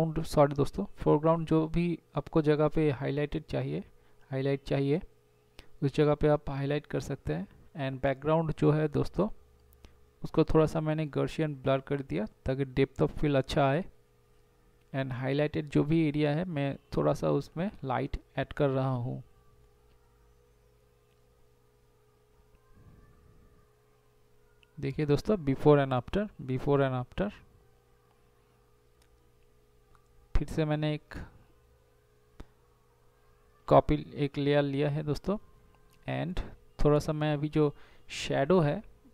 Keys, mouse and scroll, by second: 5.6 [, 6.9 [, 7.5 ], 10.0 [, 10.7 [, 12.1 ], 13.9 [, 14.9 ], 15.5 ], 16.0 ], 19.2 [, 19.9 [, 20.5 ctrl+z, 29.0 right click, 30.8 z, 33.8 b, 34.3 [, 35.6 right click, 37.6 [.